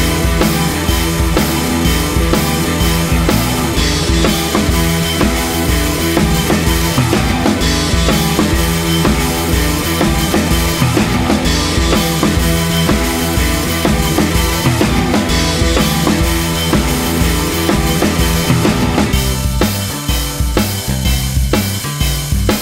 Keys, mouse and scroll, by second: 0.0-1.0 typing, 0.5 alt+m, 1.2 scroll down 4, 1.4 Tab, 1.5 middle click, 2.0 click, 2.2 r, 2.8 KP_3, 2.9 scroll up 5, 3.1 shift+middle click, 3.2 click, 3.3 scroll down 4, 3.4 click, 3.5 g, 3.8 click, 3.9-4.5 scroll up 5, 4.1 ctrl+s, 4.5 Tab, 4.8 scroll down 2, 4.8 shift+middle click, 4.9 click, 4.9 g, 5.3 alt+m, 5.7 click, 6.2 shift+middle click, 6.5 shift+middle click, 6.5 click, 6.6-14.6 typing, 6.8 scroll down 1, 6.8 shift+middle click, 8.3 click, 8.7 shift+middle click, 9.0 click, 9.3 ctrl+z, 9.8 alt+click, 11.0 click, 11.3 click, 11.4 scroll up 2, 11.9 shift+middle click, 12.1 alt+click, 12.5 alt+m, 12.8 click, 13.3 shift+middle click, 13.7 scroll up 1, 13.8 click, 14.3 shift+middle click, 14.5 click, 14.8 shift+middle click, 15.3 shift+middle click, 15.4 click, 15.6 shift+middle click, 15.8-19.9 typing, 15.9 middle click, 16.0 shift+click, 16.2 shift+click, 16.4 click, 16.5 middle click, 16.6 scroll up 3, 16.7 click, 16.9 shift+middle click, 17.4-17.8 scroll down 4, 17.6 click, 17.6 shift+middle click, 18.6 shift+middle click, 18.6 scroll up 2, 19.9 click, 20.2 scroll down 5, 20.3-21.1 shift+middle drag, 21.1-22.6 typing, 21.4 Tab, 21.5 middle click, 21.9 shift+click, 22.0 middle click.